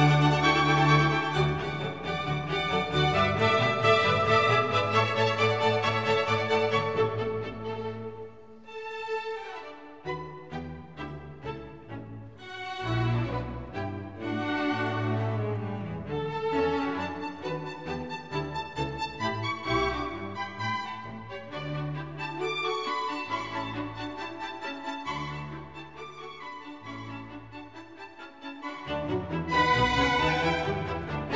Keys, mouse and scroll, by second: 3.8 f, 10.1 click, 15.8 Tab, 18.3 click, 20.1 t, 21.3 click, 21.8 t, 24.5 t, 26.9 Tab.